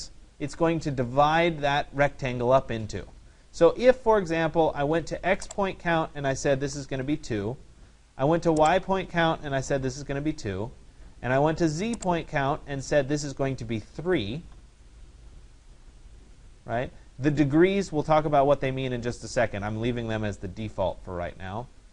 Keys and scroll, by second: 7.1 Return, 9.7 2, 10.3 Return.